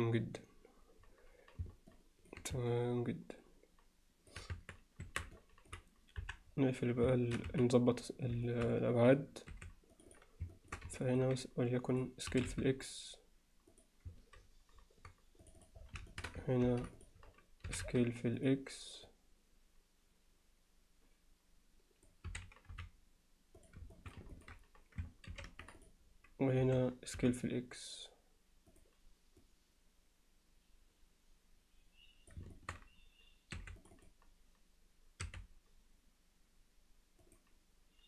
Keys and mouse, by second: 2.0 alt+click, 2.7-4.3 middle drag, 4.6 Tab, 5.1 Tab, 5.4 alt+middle click, 6.2 KP_1, 7.1 shift+middle click, 7.5 z, 8.5 alt+shift+middle click, 9.5 2, 9.9 click, 10.6 alt+shift+middle click, 11.1 ctrl+alt+middle click, 12.0 click, 12.3 s, 15.5 click, 15.6 click, 16.1 alt+shift+middle click, 16.6 ctrl+r, 17.7 s, 19.1-22.1 drag, 22.3 s, 23.9 shift+middle click, 24.3 ctrl+alt+middle click, 25.3 ctrl+r, 26.6 s, 29.5-32.4 drag, 32.5 alt+shift+middle click, 33.6 2, 33.8 click, 35.2 r.